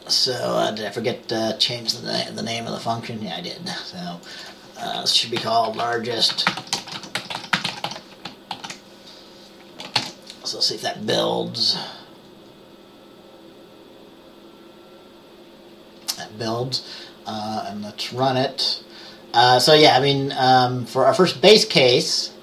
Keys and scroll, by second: 5.5-8.5 typing, 8.6 ctrl+s, 10.1 ctrl+b.